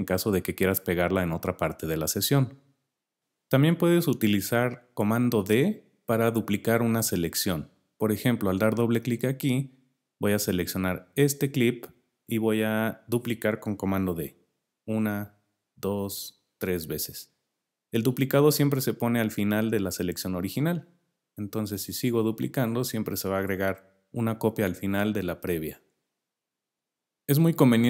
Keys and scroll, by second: 14.5 super+d, 16.4 super+d, 21.0 super+d, 23.4 super+d.